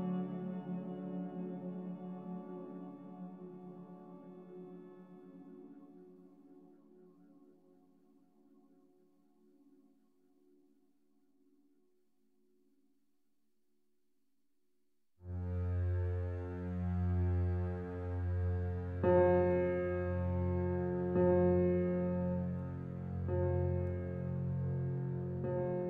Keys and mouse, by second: 0.2 ctrl+z, 0.4 ctrl+z, 0.9 ctrl+z, 1.2 ctrl+z, 1.5 ctrl+z, 1.9 ctrl+z, 2.2 ctrl+z, 2.5 ctrl+z, 3.1 ctrl+z, 4.0 ctrl+z, 4.3 ctrl+z, 5.4 ctrl+alt+click, 5.8 ctrl+z, 6.1 ctrl+z, 6.4 ctrl+z, 6.8 ctrl+z, 8.2-24.7 alt+a, 8.7-10.5 alt+drag, 10.8 ctrl+alt+click, 12.2-14.5 alt+drag, 14.2 Tab, 15.8-25.8 drag, 18.0 typing.